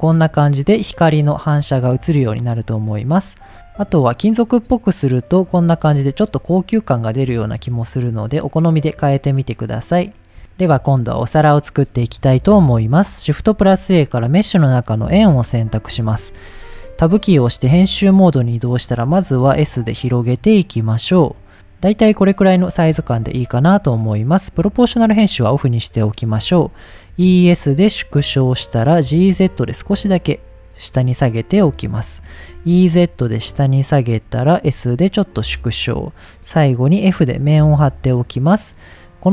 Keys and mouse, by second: 0.5 click, 2.8 middle click, 3.5 click, 4.7-5.5 drag, 6.7 click, 7.1 middle click, 8.5-8.9 middle drag, 9.6 click, 10.4 middle drag, 13.4 shift+a, 17.0 Tab, 19.1 s, 20.6 click, 21.0-23.2 middle drag, 23.9 middle click, 24.9 click, 26.0 middle click, 27.1 e, 28.7 click, 29.2 z, 30.5 click, 30.9 middle click, 32.5 e, 34.1 click, 34.7 s, 35.5 click, 37.2 f, 38.3 middle click.